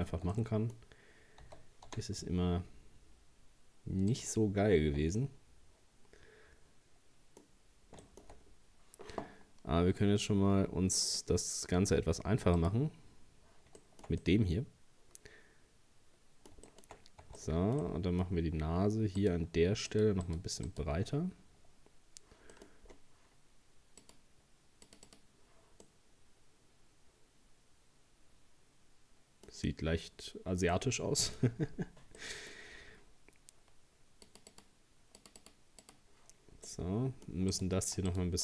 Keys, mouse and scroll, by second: 0.3-1.4 middle drag, 1.4 s, 4.5 scroll down 3, 4.8 Tab, 5.2-8.5 middle drag, 8.5-9.2 scroll up 1, 11.1-13.8 drag, 13.8-16.9 shift+middle drag, 16.9-17.2 shift+scroll up 2, 17.2 Tab, 17.4 middle click, 17.8 scroll up 1, 18.5-19.2 scroll up 1, 19.2 right click, 19.9 shift+right click, 20.3 shift+right click, 20.7 shift+right click, 22.5 middle click, 22.7-23.2 scroll down 2, 24.0-25.8 drag, 25.8-28.9 middle drag, 30.7 middle click, 31.4-32.0 scroll up 3, 32.2-34.3 middle drag, 34.3-36.7 drag, 36.7 middle click, 37.5 right click, 38.1 shift+right click.